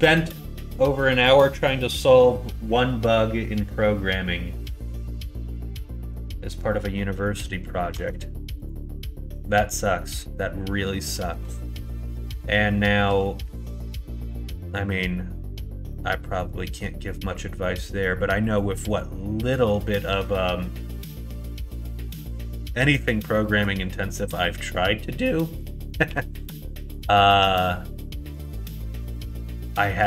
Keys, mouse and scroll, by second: 5.9 middle click, 6.9 middle click, 7.9 Tab, 8.6 click, 9.3 click, 10.1 middle click, 11.1 middle click, 11.4 Tab, 11.8 middle click, 13.0 KP_1, 13.4 KP_3, 15.9 middle click, 23.0 middle click, 24.1 middle click, 26.0 2, 26.8 click, 28.3 click, 29.5 middle click.